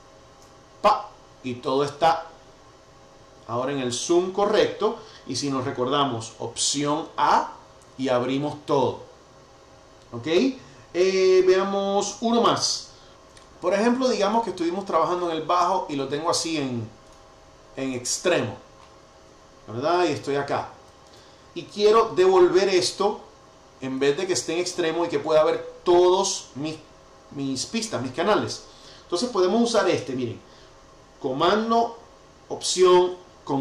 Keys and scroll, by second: 7.5 alt+a, 20.0 super+], 28.1 Escape.